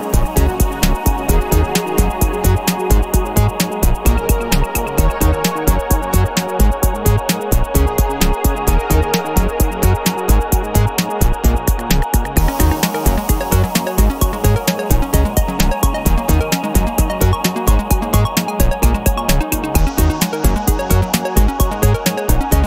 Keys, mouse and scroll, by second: 0.1 click, 1.1 click, 2.4 KP_3, 2.7 KP_0, 3.9 click, 4.6 KP_2, 4.9 KP_0, 6.2 click, 7.5 KP_2, 7.7 KP_0, 10.0 click, 11.6 click, 13.0 KP_3, 13.4 KP_0, 14.6 click, 15.8 KP_2, 16.0 KP_0, 18.1 click, 19.0 KP_2, 19.2 KP_0, 20.5 click, 21.1-21.6 scroll down 1, 22.1 click.